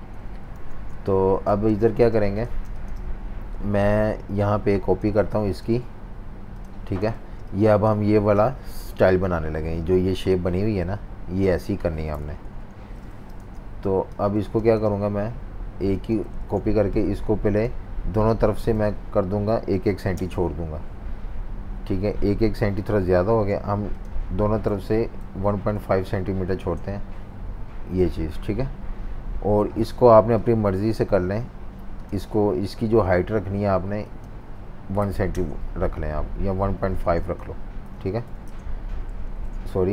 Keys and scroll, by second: 0.3 F19, 0.6-2.6 typing, 7.2-8.6 typing, 12.1 super+-, 12.3 super+-, 12.5 super+-, 13.4 z, 14.5 space, 16.4 super+z, 18.7 -, 19.8 2, 20.1 Return, 23.3 super+z, 24.6-26.2 typing, 26.5 Return, 35.0-35.3 typing, 37.0 super+z, 37.6-38.7 typing, 39.3 super+z.